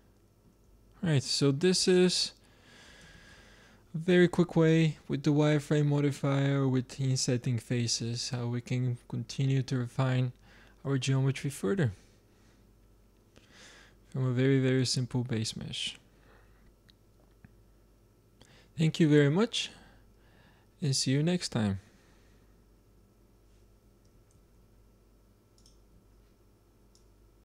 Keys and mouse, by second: 3.2 shift+z.